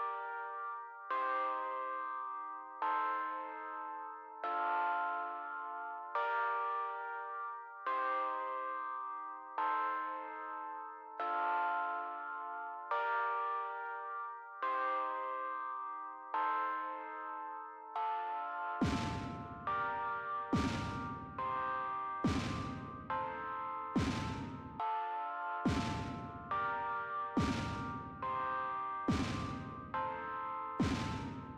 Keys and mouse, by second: 20.2 click, 21.6-22.9 drag.